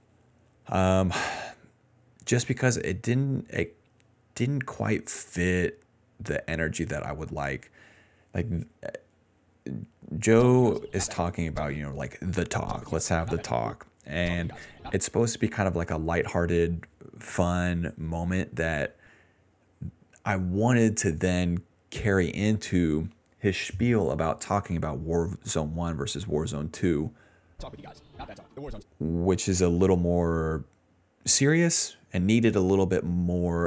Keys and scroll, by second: 8.7 s, 10.3-12.5 typing, 13.7 space, 14.2 space, 14.9 space, 15.5 a, 27.5 space, 28.7 space, 29.2 ctrl+s.